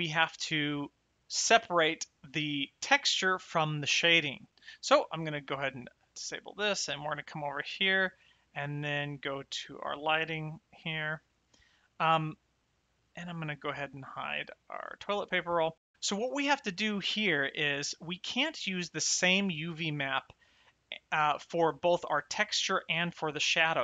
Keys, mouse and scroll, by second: 4.3 click, 6.0 click, 7.1 click, 9.0 click, 12.5 click, 14.7 click, 16.4 shift+middle click, 19.6 click, 21.6 click, 22.9 click.